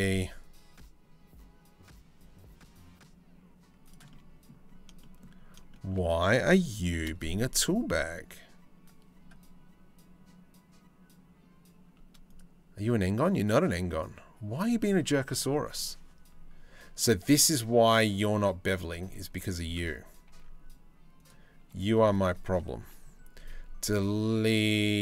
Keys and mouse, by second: 3.7 middle click, 4.6 shift+middle click, 5.3 shift+middle click, 6.5 ctrl+b, 18.0 Tab, 18.4 Tab, 18.9 1, 19.9 ctrl+r, 21.6 2, 21.8 click, 22.4 Delete.